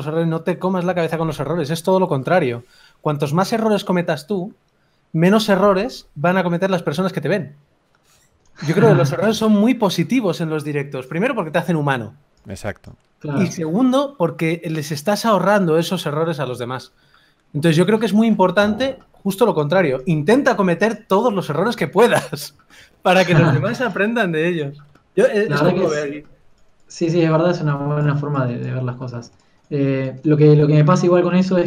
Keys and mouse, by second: 0.3 ctrl+s, 4.3 click, 4.6-5.9 drag, 10.4 g, 10.4 f, 10.4 KP_3, 14.5 f, 15.4 f, 16.6 f, 18.7 f, 18.9 click, 22.6 click, 22.8 g, 22.8 f, 24.0 g, 24.2 f, 27.4 g, 27.6 f, 30.7-31.6 drag.